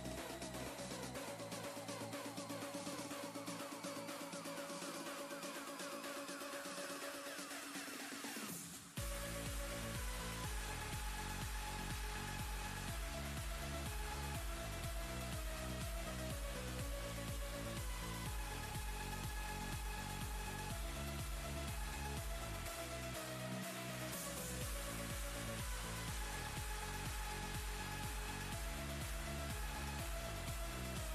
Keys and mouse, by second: 2.6-6.8 drag, 6.8 ctrl+z, 8.2-10.5 click, 11.4 ctrl+d, 14.1 shift+click, 17.7-25.7 shift+drag.